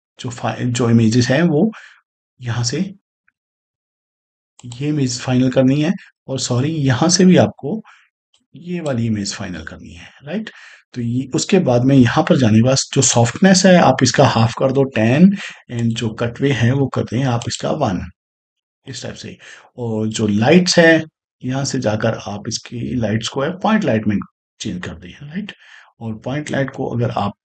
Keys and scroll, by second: 13.9 1, 14.7 0, 16.6 1.